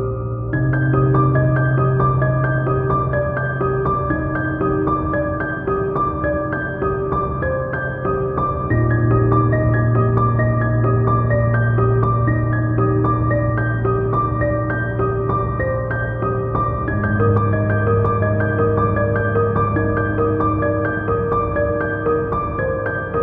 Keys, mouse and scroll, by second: 7.8 scroll down 1, 8.0 scroll up 2, 8.1 click, 8.3 middle click, 8.5 scroll down 1, 8.8 ctrl+z, 9.5 Tab, 9.7 middle click, 10.1 Tab, 11.1 Return, 11.5 click, 14.1 scroll down 1, 14.2-15.5 shift+middle drag, 14.2 KP_1, 14.5 click, 14.7 Tab, 15.2 ctrl+r, 15.6 Escape, 15.8 alt+click, 15.9 g, 16.1 alt+click, 16.2 g, 16.5 middle click, 17.8 middle click, 18.1 Tab, 18.2 click, 18.5 Tab, 18.5 shift+middle click, 18.7 f, 19.0 click, 19.6 x, 19.9 a, 20.3 scroll up 1, 20.4 Tab, 20.5 shift+middle click, 20.7 Tab, 20.8 click, 21.8 shift+click, 22.2 Tab, 22.4 ctrl+r, 22.5 click, 22.6 g, 22.7 ctrl+click, 22.8 middle click.